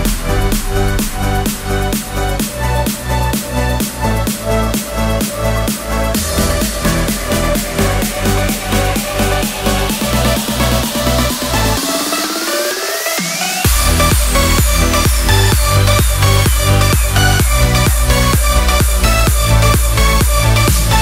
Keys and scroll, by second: 13.4 Home, 13.5 Escape, 14.8 super+a, 17.6 Home, 17.8 Escape, 18.0 alt+Left, 18.4 alt+Right.